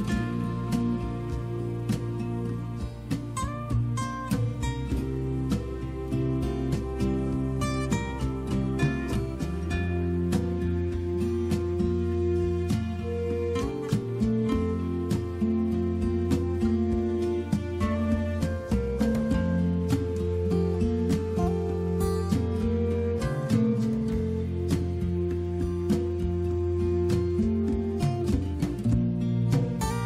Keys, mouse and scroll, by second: 0.4 click, 9.7 click, 24.4 click.